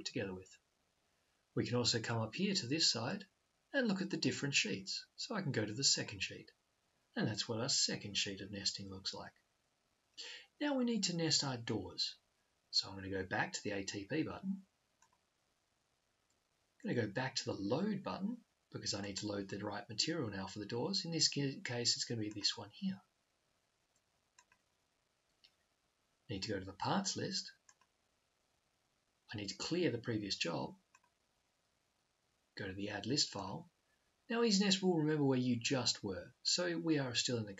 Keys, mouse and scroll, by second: 3.0-4.8 drag, 6.0 click, 15.2 click, 18.9 click, 21.9 click, 24.6-26.0 drag, 27.5-29.2 drag, 30.6-32.4 drag, 33.0 click.